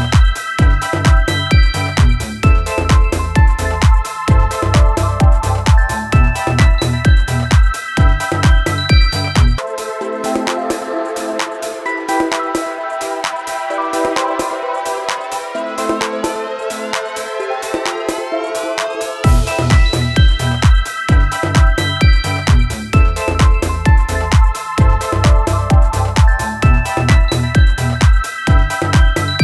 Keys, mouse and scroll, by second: 3.7 click, 10.0 click, 12.5 click, 16.1 click.